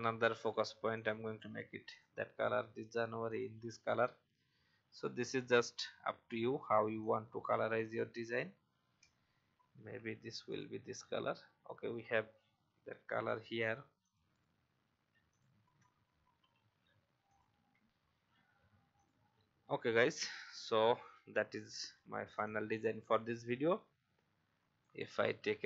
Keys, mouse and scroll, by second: 6.0 alt+scroll up 1, 7.0-8.7 drag, 9.8 i, 10.4 click, 10.8 v, 12.7-13.1 alt+scroll down 1, 14.0 click, 15.2 shift+click, 17.3 click, 17.7 v, 18.3 alt+scroll down 1, 18.9-24.9 drag.